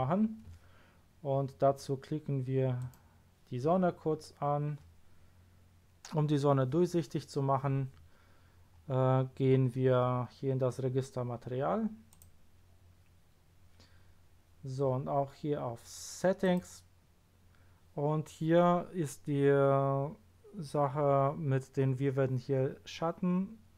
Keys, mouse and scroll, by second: 2.7 click, 3.9-5.6 middle drag, 8.1 scroll down 2, 8.7 scroll up 2, 12.1 click, 14.0 scroll down 2, 16.4 click, 17.1-19.7 scroll down 4.